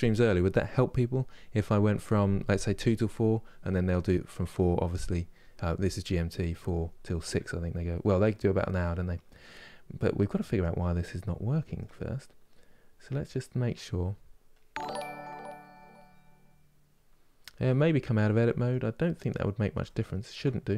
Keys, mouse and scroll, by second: 7.9-9.4 middle drag, 9.4-9.8 scroll down 3, 10.6-16.9 middle drag, 16.9-17.3 scroll down 2, 17.3 Tab, 17.8 middle click, 18.7 scroll down 2, 19.6-20.7 shift+middle drag.